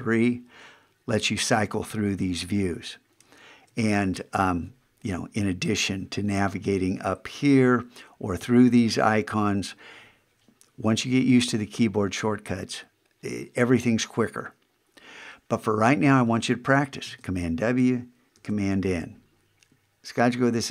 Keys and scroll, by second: 17.1 super+w, 18.4 super+n.